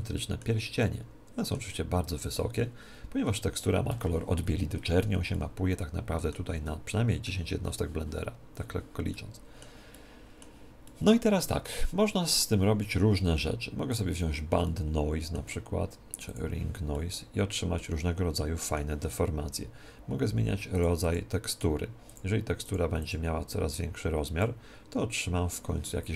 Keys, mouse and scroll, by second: 5.2-8.5 middle drag, 9.1-13.3 middle drag, 13.8-15.7 drag, 14.6-16.4 middle drag, 16.2-18.0 drag, 16.8 middle click, 18.0 middle click, 20.7-25.3 drag.